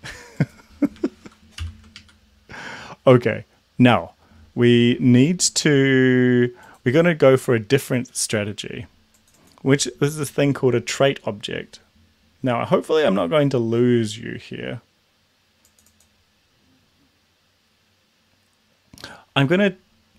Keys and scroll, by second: 1.7 ctrl+l, 2.0 Up.